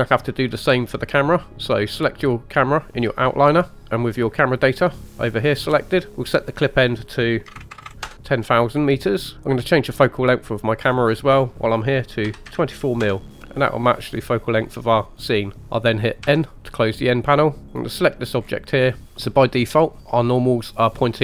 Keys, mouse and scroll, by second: 3.1 click, 6.1 click, 6.6-8.0 drag, 7.7 KP_0, 7.8 KP_0, 10.8-13.0 drag, 16.2 n, 17.2-17.9 scroll up 2, 17.7 click, 18.4-19.1 scroll down 1, 19.1 Tab, 19.1-20.1 scroll down 1, 20.1-20.8 scroll up 1.